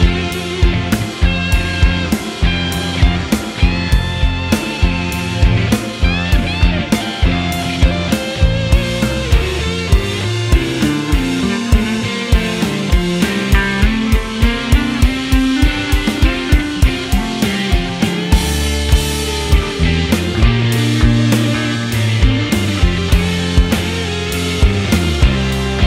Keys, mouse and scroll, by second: 0.0 scroll up 1, 0.1 shift+middle click, 0.2 ctrl+z, 0.6 ctrl+right click, 0.9 scroll down 4, 1.0 middle click, 1.3 ctrl+z, 1.7 click, 1.9 KP_1, 2.0 KP_3, 2.2 shift+middle click, 2.5 m, 2.9 ctrl+right click, 3.3 ctrl+right click, 3.6 ctrl+right click, 4.3 click, 4.4-5.6 typing, 4.8 click, 5.5 click, 6.1 shift+middle click, 6.2 scroll up 4, 6.2 shift+middle click, 6.3 click, 6.7-8.2 typing, 7.3 click, 8.1 click, 8.5 click, 9.0 click, 9.4 shift+middle click, 9.5 scroll down 1, 9.7 middle click, 9.8 scroll up 2, 9.9 shift+middle click, 9.9 scroll down 1, 10.0 middle click, 10.1 click, 10.2 `, 10.5 scroll down 10, 10.5 middle click, 10.7 ctrl+r, 11.1 alt+shift+click, 11.2 alt+shift+click, 11.4 shift+middle click, 11.7 click, 12.0 middle click, 12.3 middle click, 12.6 click, 13.0 click, 13.2 shift+middle click, 13.9 alt+shift+click, 14.2 middle click, 14.7 alt+shift+click, 15.4 alt+shift+click, 15.5 middle click, 15.7 alt+shift+click, 16.6 shift+click, 16.8 middle click, 17.3 shift+click, 17.4 ctrl+e, 17.5 scroll down 1, 17.6 middle click, 18.0 scroll up 5, 18.1 shift+middle click, 18.2 shift+middle click, 18.3 Tab, 18.4 Tab, 18.5 click, 19.1 shift+d, 19.2 scroll down 4, 19.2 shift+middle click, 19.5 click, 19.6 middle click, 19.8 scroll up 3, 19.9 shift+middle click, 19.9 shift+middle click, 20.2 KP_1, 20.3 shift+middle click, 21.1 alt+click, 21.9 shift+click, 22.1-24.6 typing, 22.5 right click, 22.6 ctrl+z, 22.7 alt+click, 23.4 middle click, 23.9 middle click, 24.8 middle click, 25.6 click, 25.7 middle click, 25.8 scroll up 2.